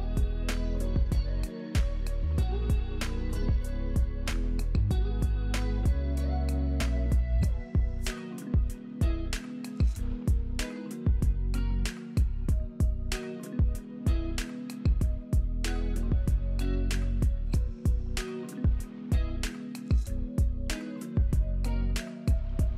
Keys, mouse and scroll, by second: 6.3-9.7 typing, 6.6 click, 9.0 click, 11.7 Return, 19.7 ctrl+click.